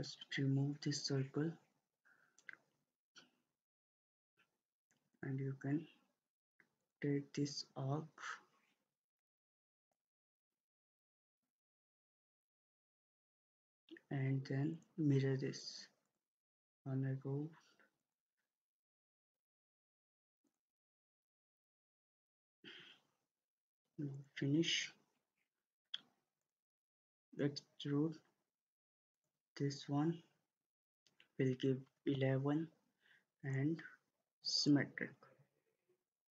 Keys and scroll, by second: 0.0 Delete, 10.9 Escape, 31.8 typing.